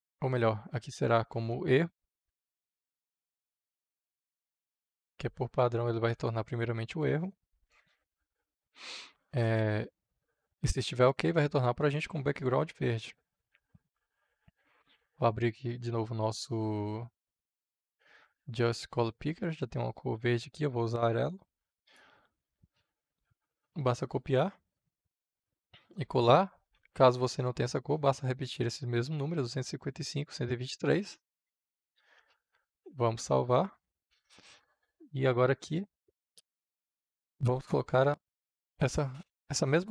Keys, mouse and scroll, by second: 2.0-3.5 typing, 4.6 r, 7.4-9.3 drag, 10.4-22.1 drag, 23.2 ctrl+c, 23.4 ctrl+c, 24.2-26.2 drag, 26.7 ctrl+v, 27.8-31.7 drag, 32.1 ctrl+s, 33.8-39.7 middle drag, 39.7-39.9 drag.